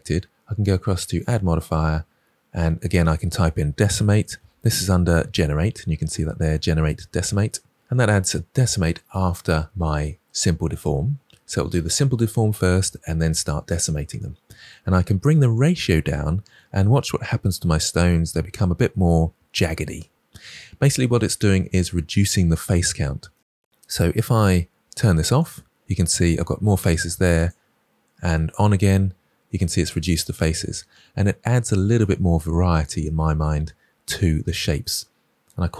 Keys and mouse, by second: 1.2-7.5 drag, 15.6-19.9 drag, 25.3 click, 27.3 click.